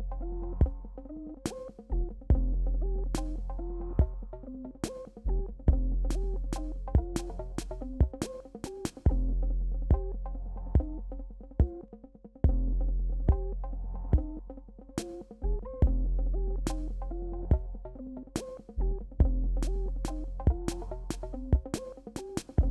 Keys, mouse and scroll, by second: 1.5-4.5 drag, 6.4-8.3 typing, 8.5 click, 9.6-10.8 drag, 11.6 ctrl+-, 12.2 ctrl+-, 14.2 click, 15.1 alt+scroll up 1, 16.5 alt+scroll down 2, 18.2 click, 18.6 alt+scroll down 1, 19.8 ctrl+-, 20.4 ctrl+=, 22.4 click, 22.5 click.